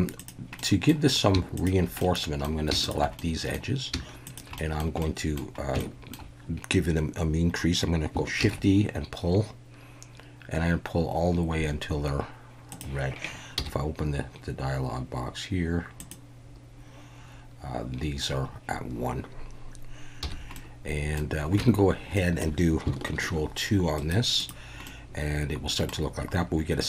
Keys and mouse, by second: 0.6 middle click, 1.6 shift+click, 2.0-2.4 middle drag, 2.8 shift+click, 3.2 middle click, 4.3 shift+click, 4.6 middle drag, 5.0 middle click, 5.8 shift+middle click, 8.4 shift+e, 12.7 click, 13.6 n, 16.1 click, 20.2 n, 20.6 middle click, 21.6 Tab, 22.2 middle click, 23.2 ctrl+2, 24.0 right click, 24.8-25.9 middle drag.